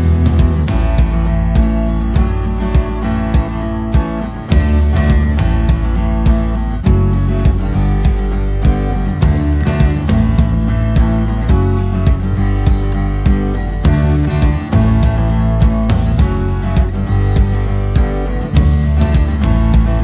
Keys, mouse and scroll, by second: 1.7 middle click, 2.4 middle click, 3.2 middle click, 4.3 i, 6.5 middle click, 7.2 alt+e, 13.1 middle click, 13.9-14.6 scroll up 2, 14.1 middle click, 17.2 middle click, 17.9 click, 18.3 scroll down 1, 18.4 middle click, 19.4 alt+e.